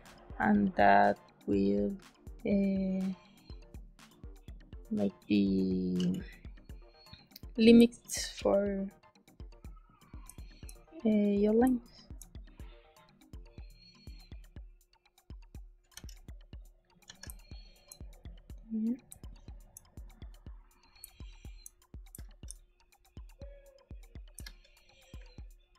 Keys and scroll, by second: 5.9 g, 7.7 space, 8.1 b, 10.2 space, 11.6 space, 15.8 e, 17.0 b, 17.2 space, 19.0 space, 20.9 space, 22.0 space, 24.3 space.